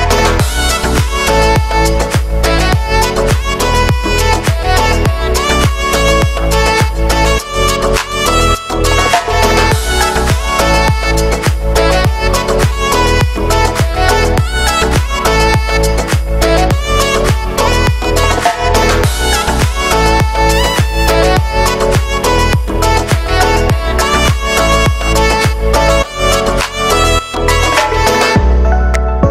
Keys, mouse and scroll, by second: 0.4 right click, 0.5 right click, 0.7 scroll up 1, 1.0 e, 2.8 scroll down 4, 3.0 Tab, 3.6-5.2 shift+middle drag, 5.2 scroll up 1, 5.3 shift+middle click, 5.8 scroll up 1, 6.0 Tab, 6.3 middle click, 6.7 scroll up 1, 6.9 ctrl+r, 9.9 shift+middle click, 10.2-10.9 scroll up 1, 11.4 click, 12.0 right click, 13.0 alt+shift+right click, 13.6 middle click, 13.9-14.2 scroll up 1, 14.2 alt+shift+right click, 14.6 g, 16.0 click, 16.7 right click, 17.4 middle click, 18.0 e, 19.8-21.5 middle drag, 21.5 scroll up 1, 21.7-22.8 middle drag, 22.8 right click, 23.7 shift+right click, 24.6 click, 24.9 shift+middle click, 25.3 right click, 26.1 alt+shift+right click, 26.6 alt+shift+right click, 27.2 shift+Right, 27.3 shift+Right, 28.7 middle click.